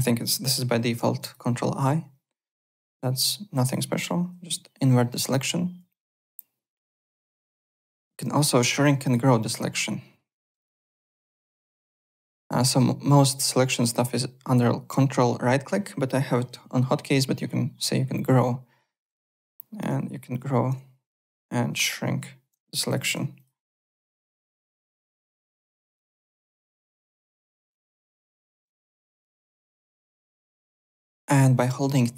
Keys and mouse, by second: 1.2 click, 2.6 click, 2.8 Tab, 3.2 click, 4.2 ctrl+i, 5.3 alt+Tab, 8.0 alt+Tab, 8.4 alt+middle click, 8.7 alt+click, 9.4 shift+right click, 10.7 ctrl+right click, 13.1 click, 13.8 ctrl+right click, 20.2 shift+., 21.1 click, 22.0 shift+,, 22.8 click, 23.3 shift+click, 25.6 shift+,, 26.4 click, 27.4 click, 27.7 ctrl+z, 29.6 `, 29.7 click, 30.0 alt+Tab, 30.3 alt+click.